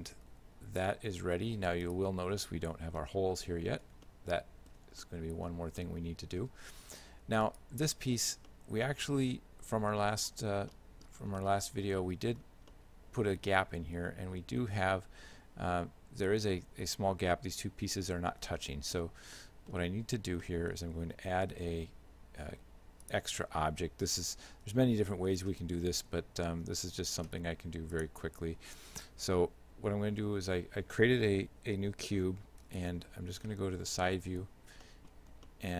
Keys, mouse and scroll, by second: 0.2 r, 2.5 shift+middle click, 4.1 shift+middle click, 5.1 middle click, 5.8 shift+middle click, 7.5 right click, 8.5 shift+middle click, 10.3 scroll up 5, 10.8 middle click, 11.2 scroll down 1, 11.4 shift+middle click, 12.8 middle click, 18.6 shift+middle click, 19.3 scroll down 2, 19.4 middle click, 20.5 middle click, 21.6 shift+a, 24.7 g, 26.1 s, 33.0 KP_3, 33.5 KP_1, 34.9 middle click, 35.3 scroll down 2, 35.5 middle click.